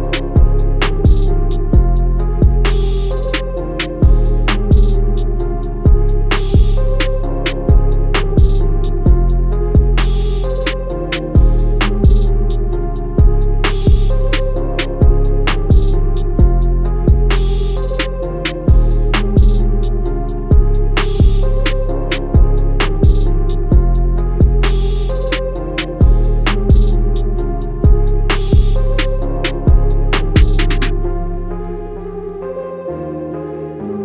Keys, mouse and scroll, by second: 6.5 scroll down 1, 10.0 right click, 10.5 click, 11.0 scroll up 1, 11.8-12.1 scroll down 1, 12.2-12.6 scroll up 2, 13.4 click, 19.1 alt+scroll down 1, 19.7 alt+scroll down 1, 20.7 scroll up 1, 21.5 click, 21.7-23.2 alt+scroll down 2, 23.2 click, 26.0-26.4 typing, 26.9 click, 28.4 alt+scroll down 1, 30.1 alt+scroll down 1, 30.6-30.9 alt+scroll up 2, 31.3-32.6 alt+scroll up 2, 33.3 click.